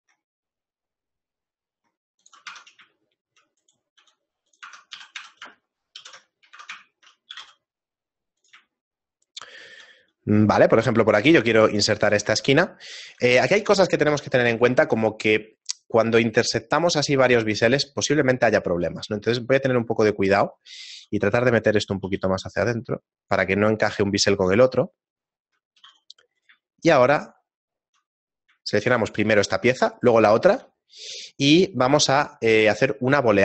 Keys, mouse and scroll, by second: 2.5 Tab, 3.0 shift+middle click, 3.6 right click, 4.0 s, 4.7 Tab, 6.0 ctrl+n, 6.3 middle click, 6.5 Tab, 6.9 shift+middle click, 7.3 g, 8.6 shift+middle click, 10.8 shift+middle click, 11.5 middle click, 11.7 shift+middle click, 12.7 shift+middle click, 15.1-15.8 scroll up 4, 17.4 middle click, 17.8-18.4 scroll down 2, 18.4 shift+middle click, 18.9 s, 20.7 g, 22.1 g, 23.7 shift+middle click, 24.8 shift+middle click, 25.8 g, 26.7 shift+middle click, 30.1 shift+right click.